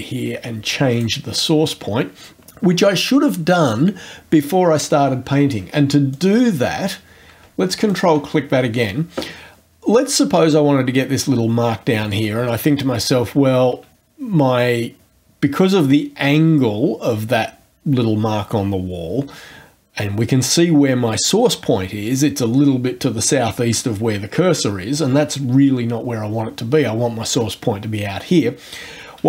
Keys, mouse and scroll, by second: 6.1 click, 7.9 ctrl+click.